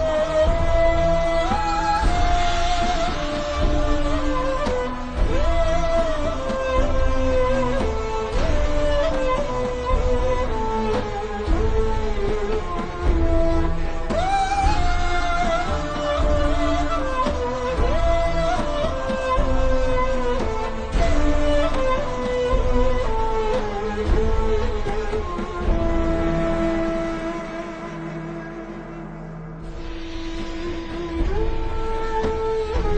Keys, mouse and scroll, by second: 6.6 click, 7.2 alt+shift+scroll down 1, 8.0 ctrl+scroll up 1, 8.8-9.1 ctrl+scroll down 2, 9.3 alt+shift+scroll up 1, 9.9-10.3 scroll up 1, 10.5 ctrl+scroll down 1, 11.3 click, 13.2 alt+shift+scroll up 1, 13.6 click, 25.7 click, 26.7 click.